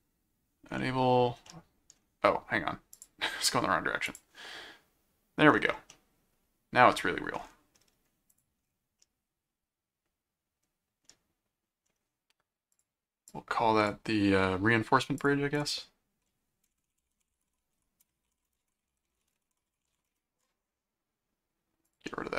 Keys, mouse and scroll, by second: 0.8 middle click, 1.4 middle click, 2.9 click, 4.1 click, 5.9-7.3 middle drag, 8.3 click, 9.0-11.9 middle drag, 12.7 click, 15.2 click, 16.6-20.4 typing, 21.8 click.